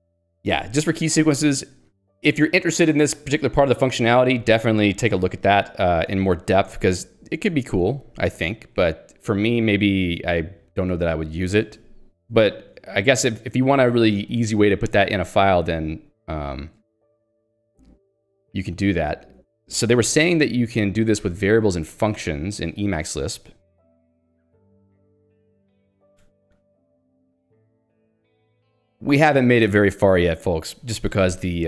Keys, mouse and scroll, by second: 2.0 click, 4.3 j, 4.7 Escape, 5.3 ctrl+g, 6.1 Escape, 6.8 j, 9.2-10.2 typing, 11.7 ctrl+d, 12.5 k, 14.5 h, 15.3 ctrl+u, 21.6 ctrl+d, 23.6-25.3 typing, 26.2 ctrl+d, 28.5 ctrl+u.